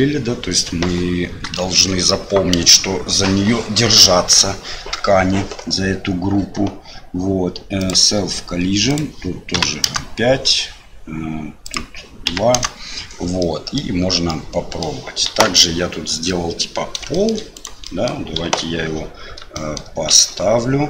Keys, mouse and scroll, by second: 1.5 shift+middle click, 7.8 click, 8.9-10.3 drag, 11.6-13.0 drag, 13.4 middle click, 14.3 middle click, 15.3 KP_1, 16.3 middle click, 17.1 shift+middle click, 17.5 click, 17.8 middle click, 18.4 KP_7, 19.5 shift+middle click, 20.1 shift+z.